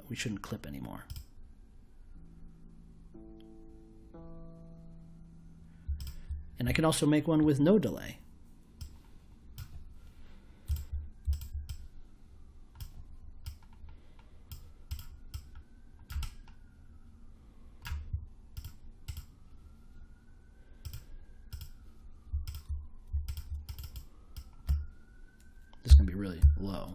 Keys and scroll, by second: 25.8 ., 26.3 5.